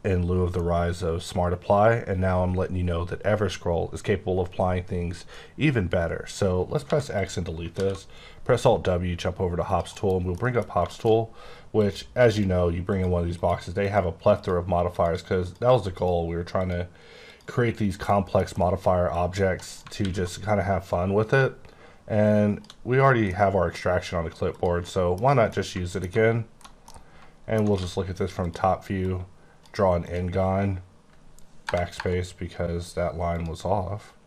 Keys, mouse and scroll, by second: 6.7 scroll down 2, 6.8 x, 7.1 click, 7.7 w, 9.6 click, 9.9 KP_Decimal, 10.3 middle click, 11.0 shift+middle click, 11.7 click, 12.2 click, 12.8 click, 13.3 click, 13.8 click, 14.3 click, 14.8 click, 15.4 click, 16.5 click, 17.2 click, 18.0 shift+middle click, 18.3 middle click, 19.1 click, 19.4 click, 19.6 right click, 20.2 click, 23.2 middle click, 24.5 click, 24.8 scroll down 2, 24.8 middle click, 25.1 scroll up 2, 25.5 middle click, 25.7 alt+middle click, 27.7 d, 28.4 click, 29.0 click, 30.0 click, 33.3 click.